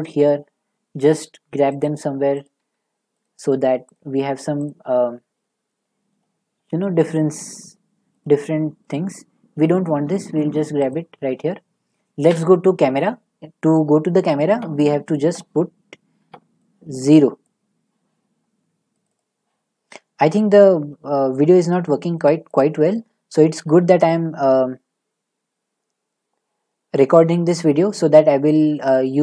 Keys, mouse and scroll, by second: 1.8 middle click, 2.6 g, 6.1 click, 7.0 scroll, 8.2 click, 9.1 2, 10.0 g, 10.9 click, 12.4 g, 19.0 click, 19.2 click, 22.6 click.